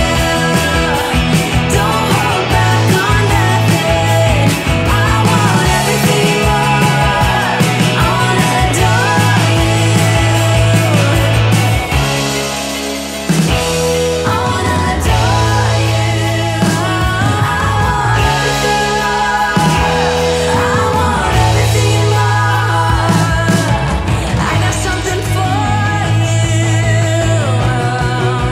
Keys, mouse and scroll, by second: 3.8 p, 6.7-9.0 drag, 16.6-25.9 drag.